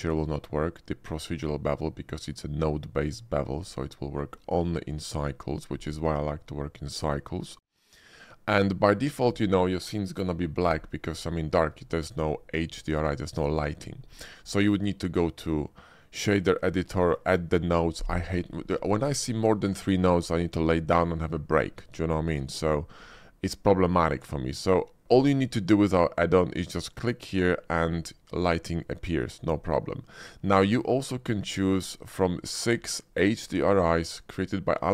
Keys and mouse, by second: 8.3 shift+middle click, 8.7 middle click, 11.3 shift+middle drag, 27.2 click, 31.4-34.9 drag.